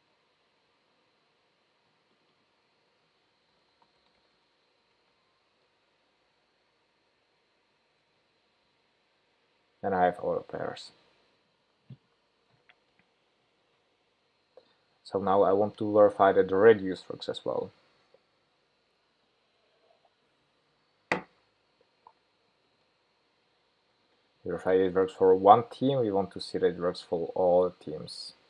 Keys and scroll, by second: 7.4 shift+super+p, 24.0 ctrl+shift+k.